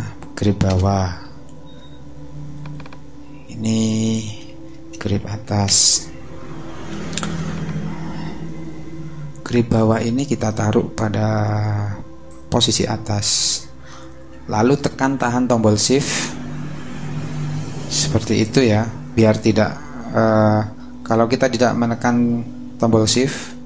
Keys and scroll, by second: 0.6 Return, 3.7-5.7 typing.